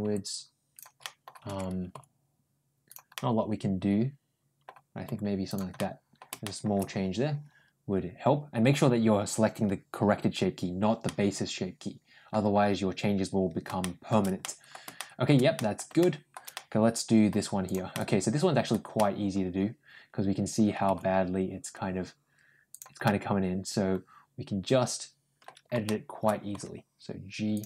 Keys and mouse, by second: 0.9 middle click, 1.7 ctrl+g, 3.0-4.5 middle drag, 4.9 ctrl+g, 5.6 middle click, 6.3 middle click, 10.9-12.1 middle drag, 13.6 shift+middle click, 14.2 middle click, 14.8 shift+middle click, 15.4 middle click, 15.8 shift+middle click, 16.4 middle click, 17.5 click, 17.8 middle click, 18.8-20.5 middle drag, 20.7 g, 22.9 middle click, 24.2-25.3 middle drag, 25.7 shift+middle click, 26.4 g.